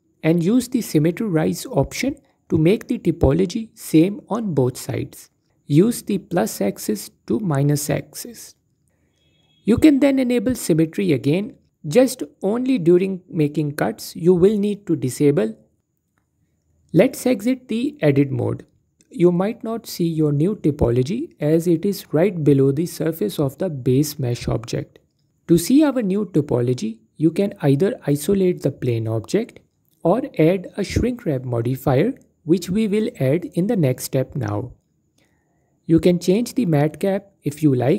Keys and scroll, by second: 16.8 Tab, 27.6 alt+q, 35.5 alt+q.